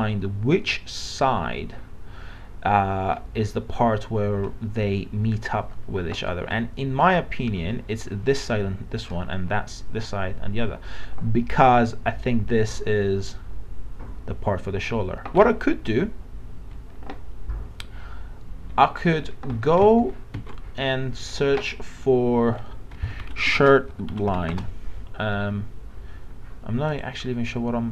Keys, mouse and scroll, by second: 18.9 alt+Tab, 19.6 alt+Tab, 20.0 alt+Tab, 20.3 alt+Tab, 21.3 click, 22.7-24.0 typing, 26.9 click.